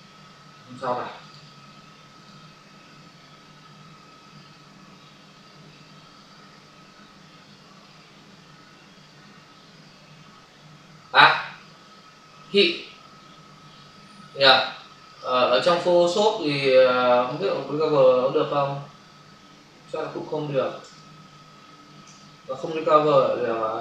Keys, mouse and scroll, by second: 1.2 click, 2.1 click, 15.1 click, 17.1 click, 20.9 ctrl+alt+z, 22.1 v, 23.0 click.